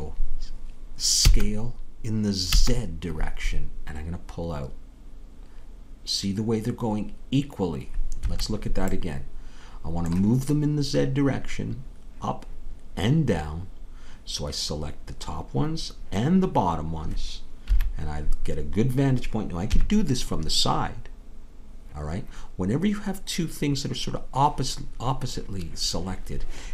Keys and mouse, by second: 1.3 s, 17.7 KP_1, 19.7 KP_3.